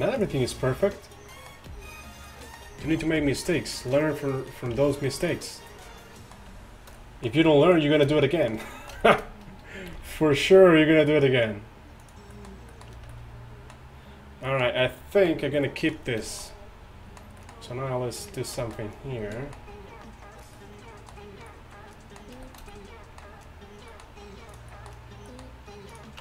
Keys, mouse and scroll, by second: 3.0 g, 4.8 ctrl+Tab, 9.9 g, 12.1 g, 13.2 Tab, 14.5 middle drag, 17.3-17.6 drag, 19.3 a, 19.8-20.6 middle drag, 21.5 middle drag, 23.0 middle click, 24.1-24.5 middle drag, 24.5-25.4 drag.